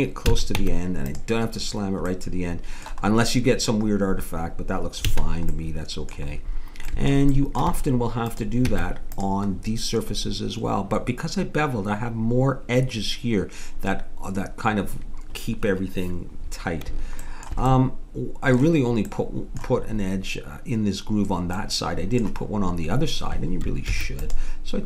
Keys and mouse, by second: 0.2 a, 0.6 Tab, 5.1 a, 5.8 middle click, 8.4 click, 9.2 Tab, 9.6 click, 16.4-17.9 middle drag, 18.2 middle click, 19.3 middle click, 23.9 ctrl+r.